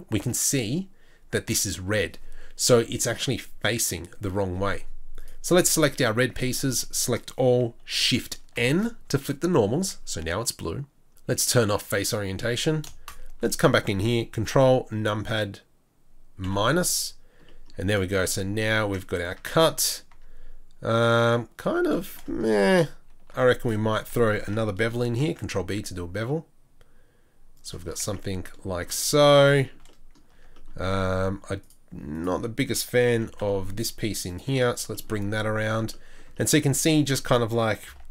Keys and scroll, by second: 6.2 Tab, 6.7 a, 8.5 shift+n, 9.7 Tab, 19.4 Tab, 20.1 Tab, 21.6 Tab, 23.3 2, 25.2 ctrl+b, 28.0 Tab, 30.3 Tab, 33.1 g, 37.9 ctrl+b.